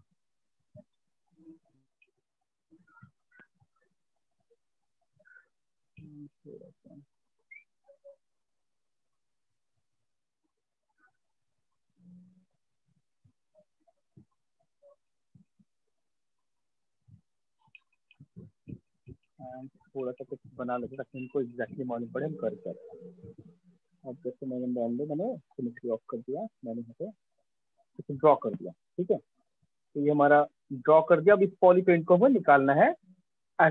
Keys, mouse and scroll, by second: 0.0 click, 0.4 click, 0.9 click, 1.6 click, 3.4 click, 3.5 click, 4.6 click, 5.8 click, 8.5 click, 9.7 click, 18.3 click, 19.5 click, 20.2 click, 22.4 click, 22.9-24.0 [, 24.9 [, 27.5 click, 30.5 click, 31.6 click, 33.2 right click.